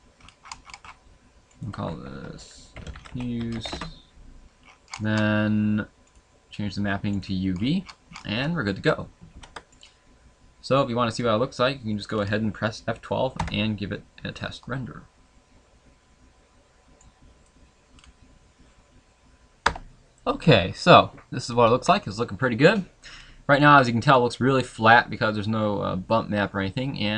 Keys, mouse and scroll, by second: 10.6 ctrl+s, 10.6 scroll down 2, 11.1 middle click, 12.1 scroll up 1, 12.3 scroll down 1.